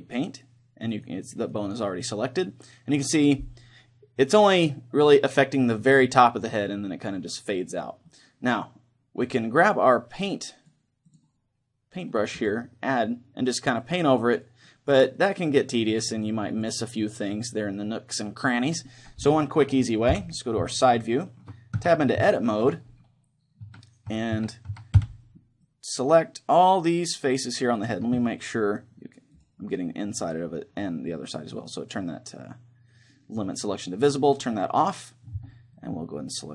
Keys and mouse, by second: 0.0 click, 1.2-4.2 right drag, 1.9-4.2 middle drag, 8.1-10.2 middle drag, 10.2 click, 12.4 click, 13.1-18.3 drag, 15.2-20.1 middle drag, 20.1 KP_3, 21.0-24.1 middle drag, 21.8 Tab, 24.1 a, 24.4 a, 24.7 a, 25.5 c, 27.8-30.0 right drag, 29.4-31.0 drag, 35.4 c.